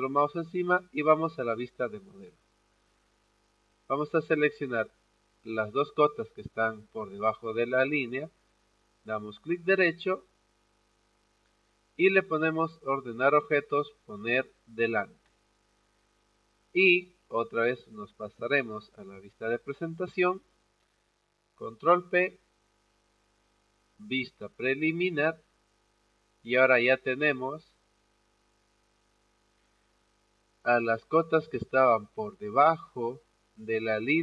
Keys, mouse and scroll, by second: 8.9-10.3 right drag, 14.8 click, 19.6 click, 21.5 ctrl+p, 24.3 click, 28.4-34.2 drag.